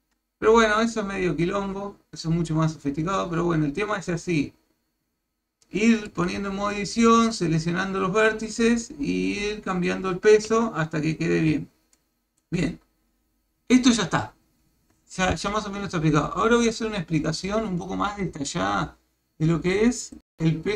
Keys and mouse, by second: 5.6 middle click, 6.2 Tab, 6.7 middle click, 7.3-8.8 middle drag, 10.5 KP_1, 11.9 shift+middle click.